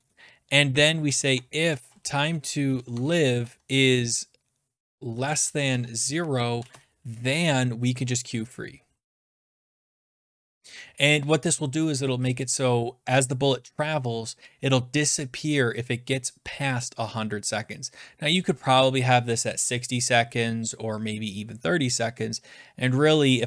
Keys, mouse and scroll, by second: 0.0-3.2 typing, 4.8-9.5 typing, 12.6 Return, 13.2 click, 14.7 click, 16.6 click, 16.8 click.